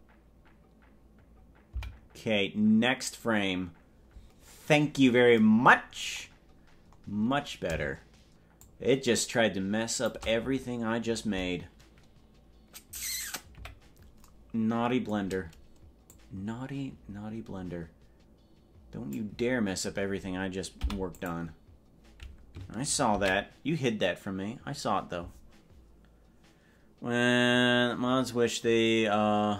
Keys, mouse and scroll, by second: 2.0 Right, 4.7-5.3 scroll down 6, 5.1 scroll up 2, 5.3 scroll down 1, 5.9-6.3 scroll down 2, 6.1 scroll up 2, 6.3-6.7 scroll down 2, 7.1-7.5 scroll up 5, 8.7-10.1 shift+drag, 13.7 KP_Decimal, 16.1-19.2 drag, 26.5 ctrl+s.